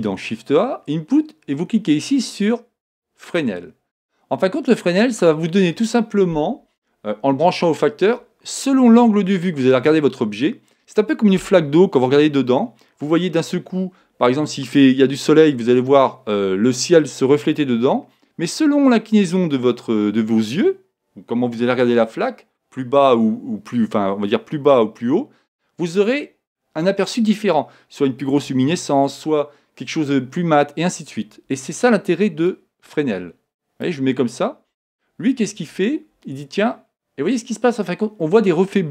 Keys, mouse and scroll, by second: 5.3-7.2 drag, 32.5-34.4 drag, 36.6-38.4 middle drag.